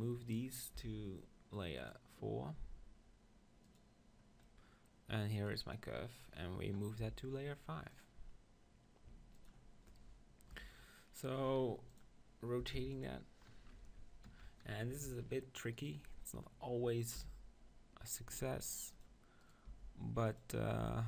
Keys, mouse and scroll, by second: 0.2 middle click, 0.8 m, 3.6-5.6 drag, 4.4-7.0 middle drag, 5.4-7.2 right drag, 7.0 m, 9.3-11.1 drag, 11.1 KP_1, 14.3 ctrl+KP_1, 14.9 Tab, 15.7-17.7 drag, 17.2 r, 19.0-21.0 drag, 19.4-21.0 right drag, 19.7 g, 20.8 e.